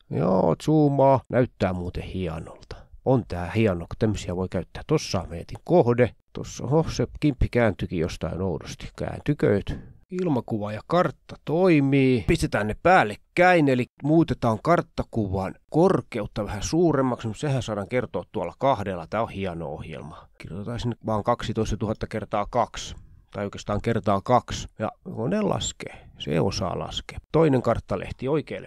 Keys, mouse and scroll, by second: 0.1 click, 1.5-2.0 ctrl+scroll up 3, 2.5-3.2 ctrl+scroll down 3, 4.2-5.3 ctrl+scroll up 2, 5.8-6.6 ctrl+scroll up 1, 6.5 shift+middle click, 8.0 Escape, 8.5 ctrl+z, 8.8 ctrl+z, 9.3-10.2 scroll down 4, 12.0 click, 13.3 click, 15.2 click, 16.9 click, 17.8 click, 18.0 click, 18.2-19.2 typing, 21.0 click, 21.6-22.1 ctrl+scroll down 2, 22.6 click, 22.8 click, 24.0 click, 24.2 click, 24.7-25.6 ctrl+scroll up 4, 25.1 click, 25.7-26.0 scroll down 4, 26.0 shift+scroll up 1, 26.1 ctrl+shift+click, 26.5 Up, 27.1-27.8 scroll up 2, 27.3 shift+click, 28.0 click.